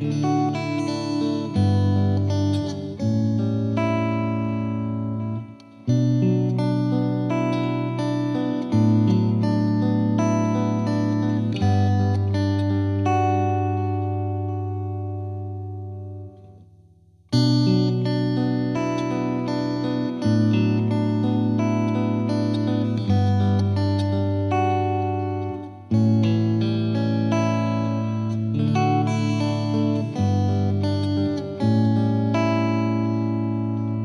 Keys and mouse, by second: 3.8 click, 4.9 click, 5.5 click, 6.2 click, 7.0 click, 7.1 click, 7.4 click, 8.1 click, 8.2 click, 8.4 click, 8.8 Delete, 9.6 click, 11.8 click, 11.8 click, 12.8 click, 12.9 click, 13.3 click, 13.5 Delete, 14.4 click, 16.4 click, 16.9 shift+click, 17.3 click, 18.0 click, 18.7 click, 19.4 click, 20.5 click, 20.6 click, 21.4 click, 21.4 click, 22.3 click, 24.0 click, 24.6 F3, 25.1 F2, 25.2 click, 29.0 click, 30.4 click, 30.5 click, 30.8 click, 30.9 click, 31.3 click, 31.3 click, 32.2 click, 32.3 click, 32.7 click, 33.1 click, 33.4 F2, 33.7 click.